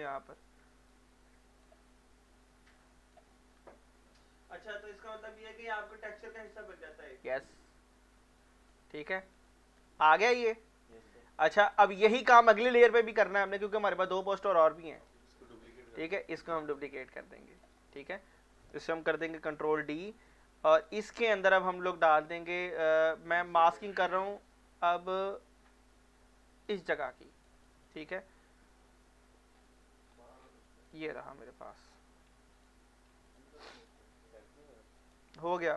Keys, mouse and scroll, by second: 0.9-2.7 shift+drag, 2.7 alt+click, 3.3 middle click, 4.2-6.4 drag, 6.4-8.4 drag, 9.0 alt+middle click, 9.5-11.7 alt+drag, 16.0 click, 16.2-17.8 alt+drag, 17.8 alt+middle click, 18.5 click, 19.5 ctrl+d, 20.8 click, 22.3 alt+click, 23.5 click, 25.6 click, 27.2 alt+click, 29.6-30.1 scroll up 1, 30.1-30.8 scroll down 1, 30.8 click, 31.3 alt+middle click, 31.7 alt+scroll down 1, 31.9-32.3 scroll up 1, 32.3 x, 32.5 click, 33.1 x, 33.3 click, 33.6 click, 33.7 alt+click, 35.0 right click.